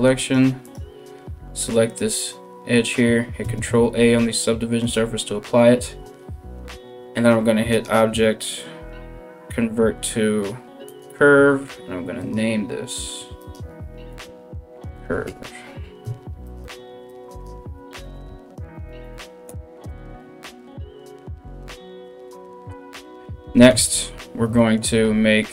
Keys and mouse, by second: 0.0 middle click, 0.2 right click, 0.3-7.3 middle drag, 3.0 ctrl+a, 7.3-12.0 drag, 12.0-13.1 middle drag, 13.1-25.5 drag, 19.6 BackSpace, 22.2 BackSpace, 23.3 KP_1.